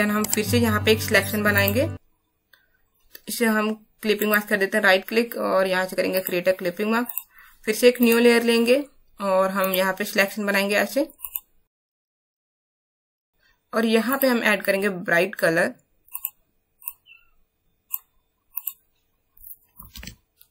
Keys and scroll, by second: 19.9 alt+BackSpace.